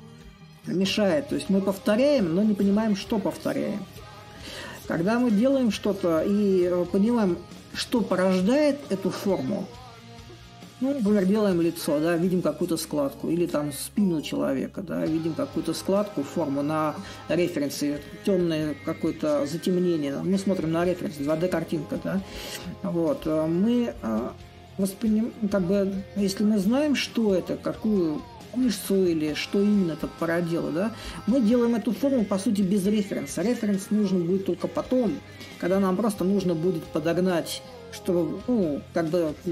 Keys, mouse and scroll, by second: 0.0-2.2 drag, 2.4-3.7 drag, 3.7 a, 5.4-10.4 drag, 11.3-16.3 drag, 17.0-22.0 drag, 22.9-27.5 drag, 27.6-32.6 shift+drag, 34.5-39.5 drag.